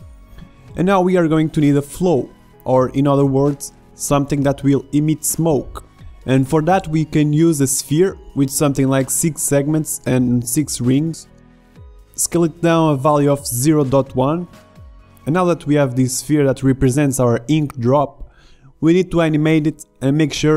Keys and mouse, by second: 2.0 shift+a, 9.4 click, 12.9-14.6 drag, 14.6-16.4 middle drag, 16.4 s, 18.1-19.3 drag, 19.3 KP_7.